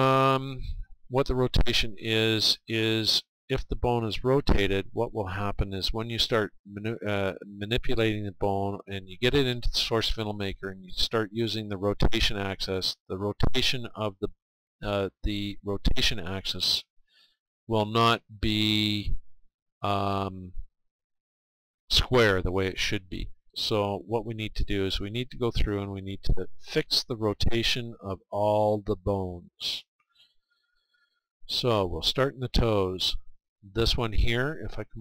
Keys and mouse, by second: 7.9-16.6 middle drag, 25.6 middle click, 27.2-35.0 middle drag.